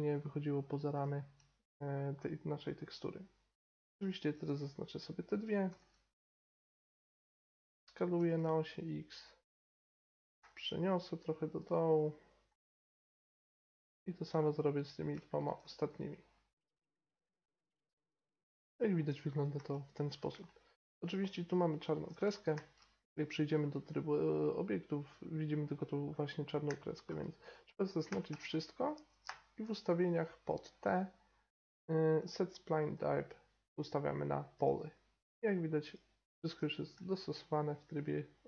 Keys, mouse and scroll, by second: 2.4-3.5 middle drag, 3.5 click, 5.6 s, 8.1 s, 10.2 g, 12.4 g, 13.4-14.8 middle drag, 14.8-15.8 right drag, 16.5-18.2 typing, 17.0 click, 18.0 right click, 18.6 Tab, 19.5 Tab, 22.5 Tab, 26.6 Tab, 28.0 a, 28.2 a, 29.2 t, 32.8-34.6 drag, 36.5 t, 36.9 Tab.